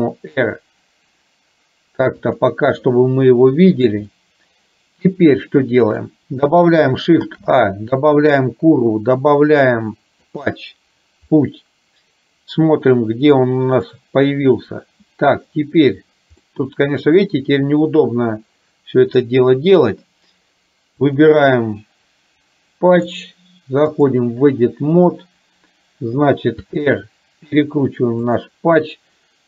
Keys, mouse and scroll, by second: 3.4 middle click, 4.3-6.0 shift+middle drag, 7.3 shift+a, 11.5-13.9 middle drag, 16.4 middle click, 17.1 click, 19.2 click, 23.0-24.3 drag, 26.7 r.